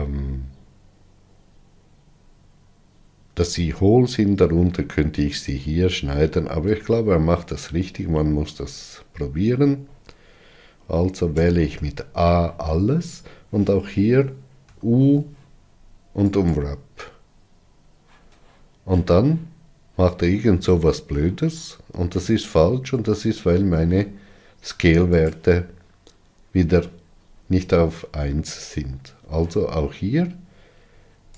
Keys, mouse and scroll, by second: 8.4-9.5 scroll down 7, 11.8 a, 17.0 u, 23.2 Tab.